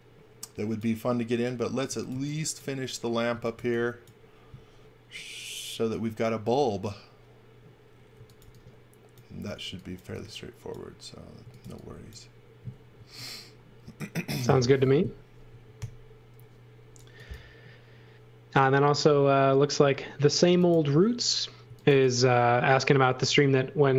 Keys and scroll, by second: 1.6-4.0 typing, 8.1 x, 8.4 v, 9.6 x, 10.0 v, 11.1-12.9 typing, 15.7 i, 21.4-22.3 typing.